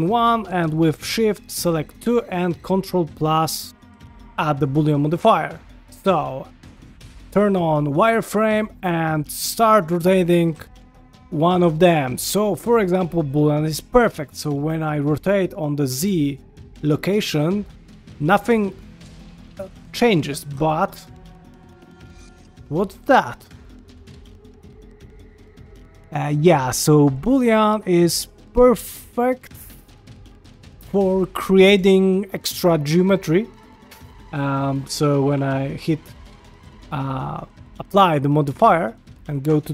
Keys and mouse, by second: 1.3 shift+click, 3.7 ctrl+KP_Add, 5.4 shift+middle click, 6.7-8.1 drag, 8.4 ctrl+middle click, 8.8 click, 10.3 r, 29.2 shift+middle click, 30.3-30.8 ctrl+middle drag, 30.9-31.4 shift+middle drag, 31.8-32.9 shift+middle drag, 33.0-33.5 ctrl+middle drag, 34.2 ctrl+middle drag, 35.3 q, 39.4 Tab.